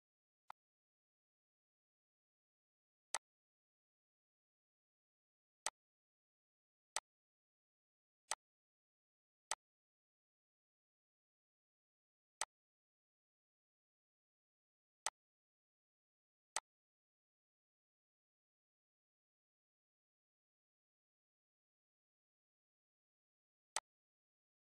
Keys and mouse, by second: 0.3 click, 2.2 click, 5.8 click, 10.3 click, 11.5 click, 13.4 click, 16.5 click, 17.5 click, 19.4 click, 21.4 click, 24.5 click.